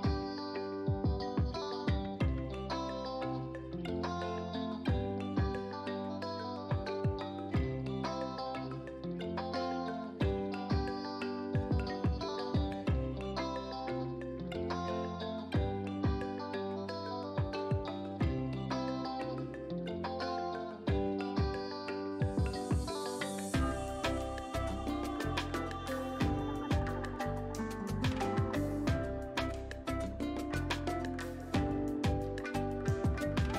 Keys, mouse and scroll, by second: 0.7 click, 0.9 ctrl+a, 2.3 click, 12.8 click, 13.8-14.1 typing, 14.4 Return, 17.2 click, 20.2-20.6 typing, 20.9 Return, 23.4-26.1 drag, 26.1-26.6 typing, 26.8 Return, 29.2 click, 30.2 ctrl+a, 31.6 click, 31.7 click, 33.1 ctrl+d.